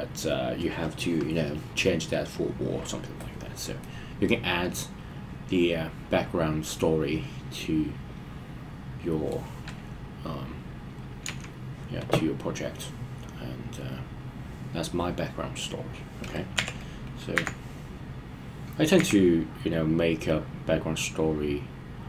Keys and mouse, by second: 3.9-4.5 middle drag, 7.6-9.3 middle drag, 11.2 KP_1, 16.6 e, 17.3 z, 19.0 z.